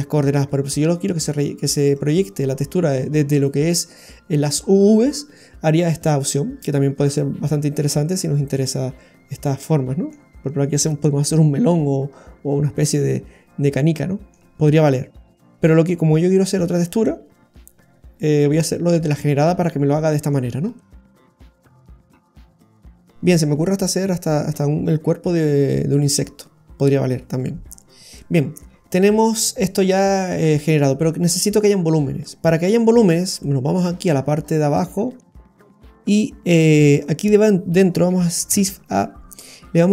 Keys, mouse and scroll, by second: 1.9 click, 5.3 middle click, 12.1-13.7 scroll up 4, 12.8 middle click, 16.6 click, 19.6 middle click, 20.6-21.3 scroll down 8, 21.3 middle click, 21.9-22.6 scroll down 2, 22.9-23.3 scroll down 3, 27.9-28.2 scroll down 2, 28.1 middle click, 28.7-29.2 scroll down 2, 29.9 scroll up 1, 32.2 middle click, 32.9-33.4 scroll up 7, 33.4 middle click, 33.9-35.3 scroll up 8, 35.3 middle click, 35.3-35.8 scroll up 3, 38.5 shift+a.